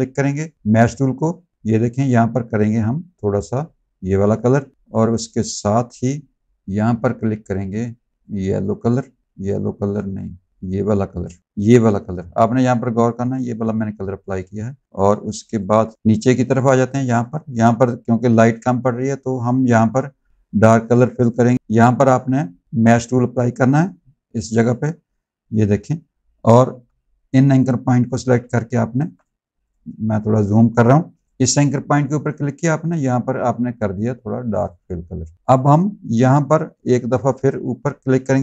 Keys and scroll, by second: 10.2 ctrl+z, 15.1 z, 15.8 space, 21.5 ctrl+z, 26.6 a, 28.8 z, 30.3 space.